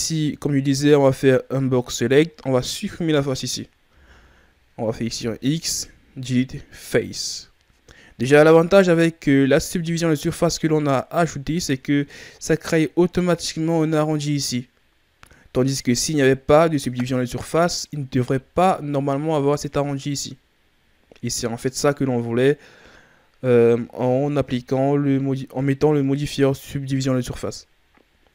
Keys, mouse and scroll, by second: 3.9 z, 4.9 x, 9.5-11.6 ctrl+scroll up 3, 11.6-12.2 shift+scroll down 4, 12.2-15.1 scroll up 2, 18.1-20.4 shift+scroll up 5, 28.0-28.3 scroll down 3.